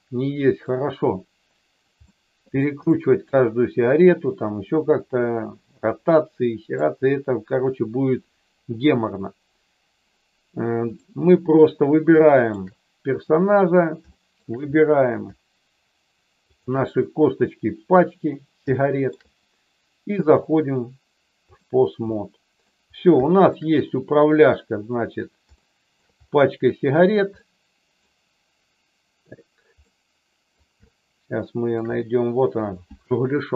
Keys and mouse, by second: 0.6-1.9 middle drag, 2.0 shift+middle click, 2.9 shift+middle click, 6.0 middle click, 12.2 shift+middle click, 13.1 click, 14.1 shift+middle click, 16.5 shift+click, 18.7 shift+middle click, 20.4-21.7 drag, 22.1 middle click, 23.2 shift+middle click, 25.6 shift+middle click, 27.5 middle click, 29.8 middle click, 30.8 shift+middle click, 32.6 click.